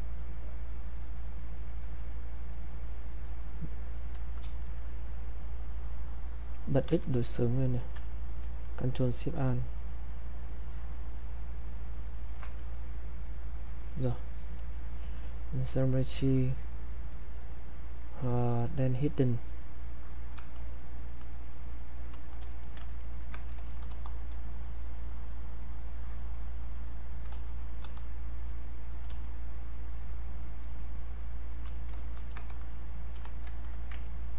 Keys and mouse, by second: 6.9 x, 9.3-22.5 ctrl+alt+shift+drag, 22.5 alt+click, 23.0 ctrl+right click, 23.9 r, 24.7-27.3 drag, 27.3-29.1 typing, 28.3 click, 29.6-32.2 drag, 32.2 ctrl+shift+1, 32.6 click, 33.6 alt+click, 34.0 ctrl+right click.